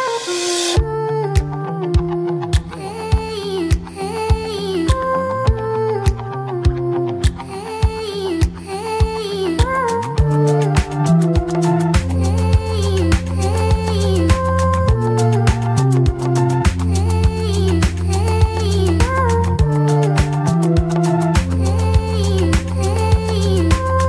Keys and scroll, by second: 3.5 ctrl+t, 18.7 ctrl+t.